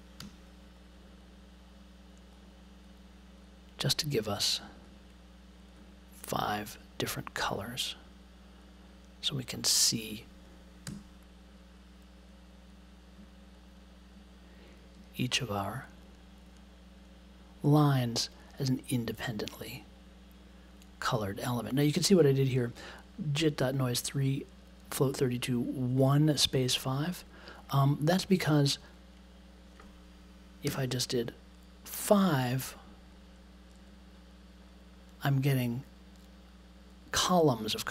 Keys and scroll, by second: 0.1 ., 10.8 b, 30.6 5.